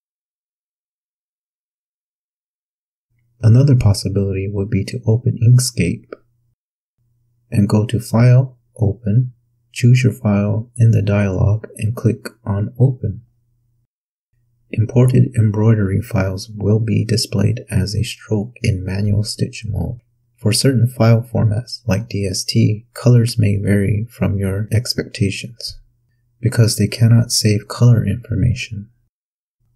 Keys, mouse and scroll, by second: 1.2-1.5 ctrl+scroll down 2, 3.0 click, 3.3 click, 4.8 click, 7.3 click, 8.6 click, 10.7 click, 16.8 click, 17.5 click, 19.7 click.